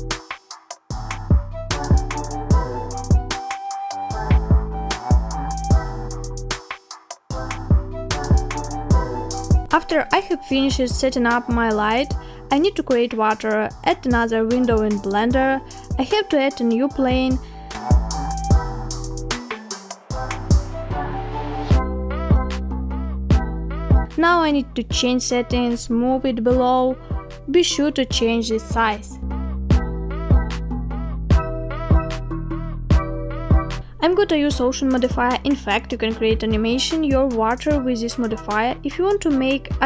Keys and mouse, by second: 6.1-7.2 middle drag, 10.1-13.2 drag, 13.6-14.2 middle drag, 16.1 shift+middle drag, 17.0 middle click, 17.8 shift+middle click, 19.1-20.4 middle drag, 21.4 shift+a, 30.1 drag, 31.3-36.2 drag.